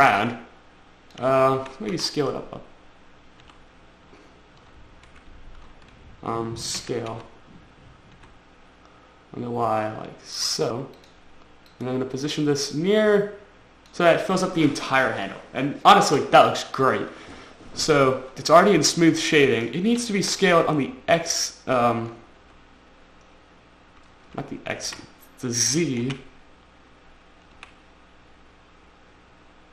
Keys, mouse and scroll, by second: 0.4 click, 1.9 s, 2.3 y, 3.8 t, 5.4 Escape, 7.1 s, 8.5 y, 11.4 click, 12.1 click, 20.3 s, 21.0 x, 22.9 x, 24.7 Escape, 25.3 s, 26.5 z, 28.0 z.